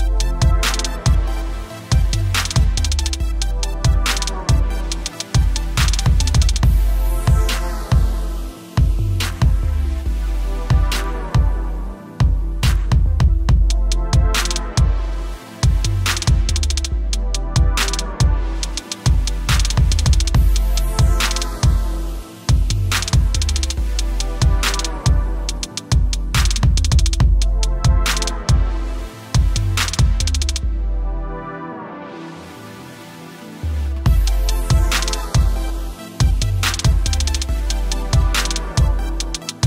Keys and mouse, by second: 0.1 click, 0.7-2.9 typing, 4.5 x, 5.5 x, 6.7-7.8 typing, 8.2 ctrl+v, 9.2 ctrl+Tab, 9.9 v, 10.4 a, 10.9 click, 22.9 ctrl+l, 24.6 click, 34.8 typing, 35.9 typing.